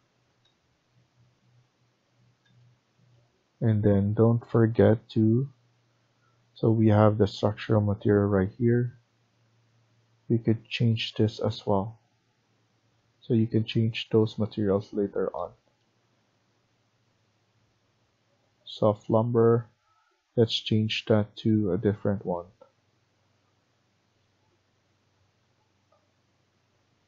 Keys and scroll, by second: 13.0 Escape, 13.3 Escape.